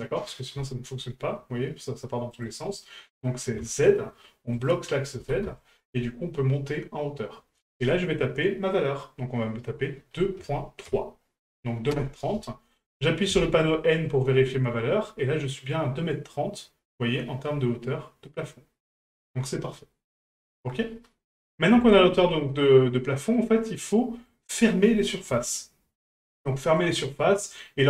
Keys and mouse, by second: 21.0-21.5 middle drag, 21.9 shift+middle drag, 22.5-23.3 middle drag, 23.9 middle click, 27.0-27.6 middle drag.